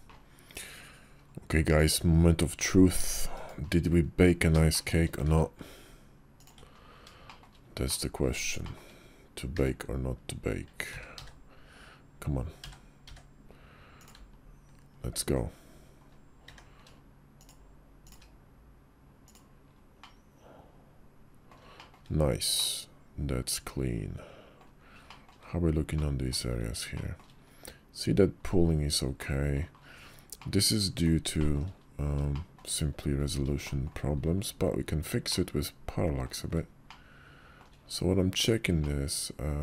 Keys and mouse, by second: 2.4 g, 4.5 shift+click, 5.1 shift+d, 7.1 shift+middle drag, 7.7-8.1 middle drag, 8.5 shift+middle drag, 8.8 KP_5, 9.4 d, 10.7 q, 12.5 w, 13.0 d, 17.3 shift+d, 19.9-21.4 middle drag, 21.6 shift+middle click, 22.4-24.5 middle drag, 24.9 shift+middle drag, 25.8 middle click, 26.8 shift+middle click, 29.0-29.4 middle drag, 30.2-30.9 middle drag, 31.2 shift+middle click, 32.2 shift+middle click, 33.5 shift+middle click, 35.2-36.1 middle drag, 36.7-37.4 shift+middle drag, 38.7-39.6 middle drag.